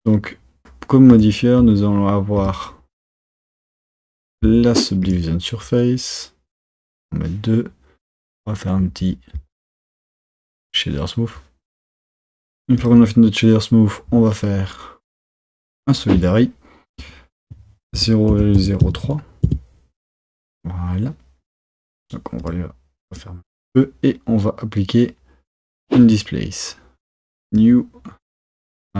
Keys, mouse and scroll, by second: 1.2-2.5 drag, 3.2-6.2 drag, 6.9-11.3 drag, 12.9 click, 15.9 click, 17.0-20.1 drag, 21.7-23.2 drag, 26.0-28.9 drag.